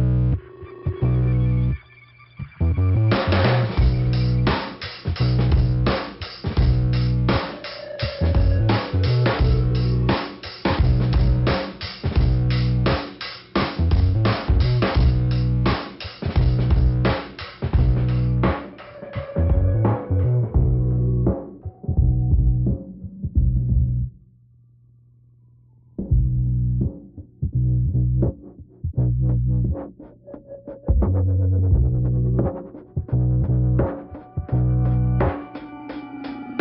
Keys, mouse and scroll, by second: 1.1 click, 2.6 click, 3.1 click, 3.7-4.8 scroll down 3, 4.1 click, 6.3 click, 7.2 scroll up 1, 8.5 click, 9.6 scroll down 1, 10.5 click, 13.2 click, 15.4 click, 17.1 scroll up 2, 17.8 click, 18.6 scroll down 2, 18.9 click, 19.7 click, 22.7-23.9 scroll down 2, 25.4 click, 27.5 click, 28.2 click, 29.1 click, 30.0 click, 30.1 click, 30.9 click, 32.3 middle click, 35.5 middle click.